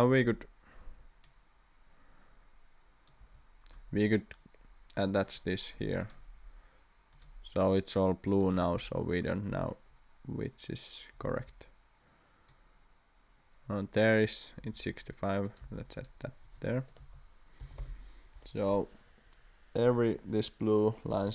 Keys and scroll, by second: 0.1 Escape, 3.2 Escape, 11.3 Escape, 14.6 Escape, 15.6 d, 17.0 6, 17.6 5, 17.8 Return.